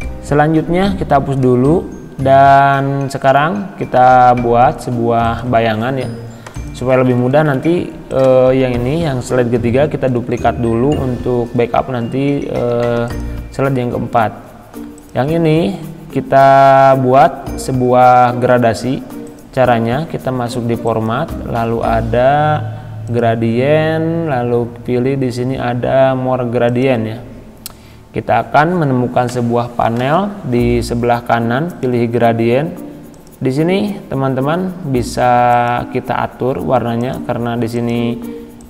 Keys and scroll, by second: 10.1 ctrl+d.